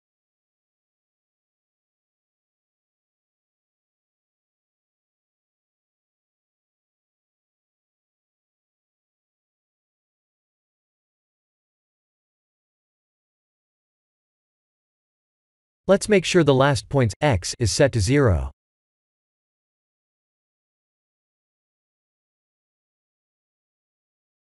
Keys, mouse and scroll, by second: 1.9 ctrl+click, 2.9 alt+shift+middle click, 3.7 shift+scroll up 1, 3.7 alt+shift+middle click, 4.7 e, 7.3 click, 7.7 e, 10.0 click, 10.8-11.8 alt+shift+middle drag, 12.9 e, 16.7 ctrl+click, 17.4 n, 20.0-21.6 drag, 22.1 Tab, 24.1-24.5 alt+shift+middle drag.